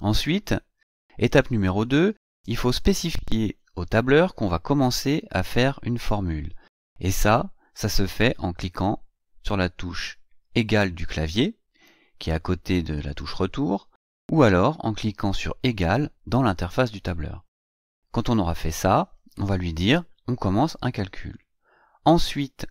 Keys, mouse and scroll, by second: 0.5 Right, 21.8 Right.